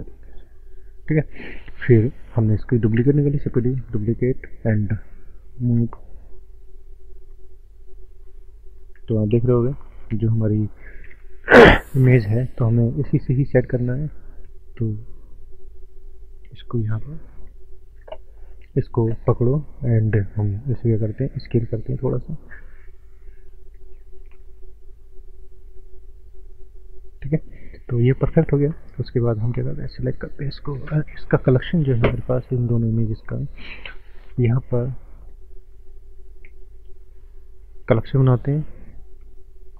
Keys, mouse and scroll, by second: 2.5 click, 3.7 shift+d, 3.9 click, 5.0-5.4 scroll down 2, 5.4 shift+middle click, 6.3 click, 6.4 click, 8.8-9.3 scroll up 3, 9.5 middle click, 11.2 KP_1, 12.0 shift+middle click, 12.1 shift+middle click, 13.0 click, 17.7 shift+middle click, 17.7 scroll up 1, 18.8 click, 18.8 click, 19.6-20.0 scroll down 3, 22.0 scroll up 1, 22.6 scroll up 3, 23.0 scroll down 1, 23.8 scroll down 1, 23.8 s, 27.1 click, 28.0 click, 28.5 middle click, 28.9 click, 29.0 click, 30.9 Delete, 32.4 click, 34.4 n, 35.2 right click, 35.2 right click, 36.7 click.